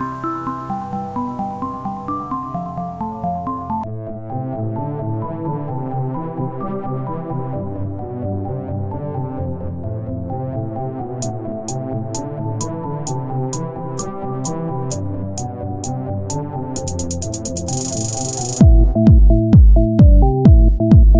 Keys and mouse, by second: 0.9 o, 1.3 e, 3.4 s, 3.9-11.0 drag, 4.7 z, 11.0 r, 12.9 f, 13.6 KP_1, 14.2 z, 15.6 e, 16.9-18.0 drag, 17.5 r, 18.1 z.